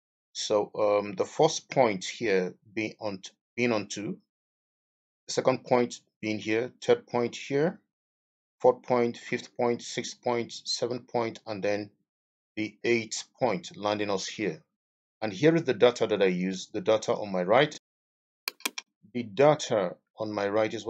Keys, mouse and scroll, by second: 19.9 Escape.